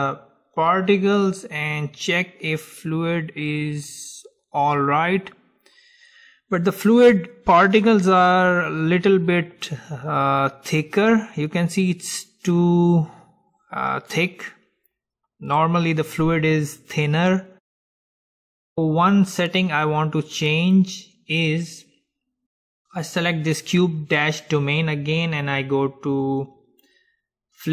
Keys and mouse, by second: 5.8-7.9 middle drag, 8.7-12.6 drag, 18.4 middle click, 18.9-20.8 middle drag, 20.8-22.8 drag, 26.6-27.7 drag.